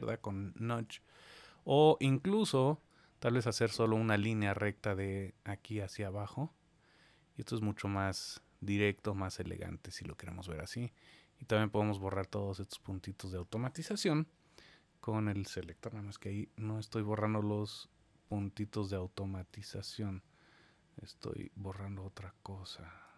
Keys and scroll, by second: 16.0 super+z.